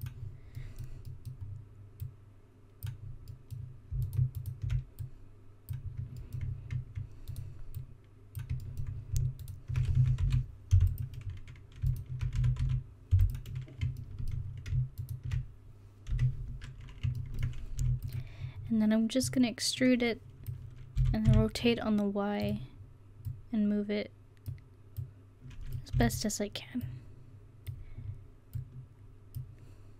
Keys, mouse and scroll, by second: 1.2-4.1 drag, 5.1-6.2 right drag, 6.3 middle click, 7.8 right click, 8.7 middle click, 10.0 s, 12.4 s, 16.2 KP_1, 17.9 e, 21.0 r, 26.0 e.